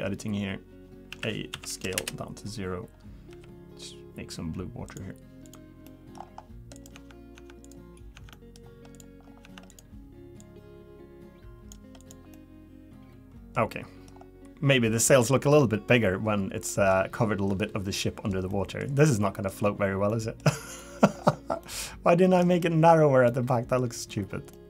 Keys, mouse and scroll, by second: 1.1 a, 1.5 s, 3.3 g, 5.4 click, 5.8 middle click, 6.2 scroll up 3, 6.7 click, 6.7 scroll up 1, 6.9 Tab, 7.3 Tab, 7.6 click, 8.1 Tab, 8.3 middle click, 8.9 click, 9.2-9.7 scroll down 3, 9.4 Tab, 9.7 click, 10.4 click, 12.0 click, 12.3 middle click, 13.7 middle click, 14.1-14.7 scroll up 3, 14.7 middle click, 16.7 middle click, 17.9 middle click, 18.5 middle click, 19.0 middle click, 20.1 middle click, 20.4-20.8 scroll down 4, 20.8 middle click, 21.1-21.6 scroll up 6, 21.6 middle click, 23.3 middle click, 24.1 scroll down 2, 24.5 middle click.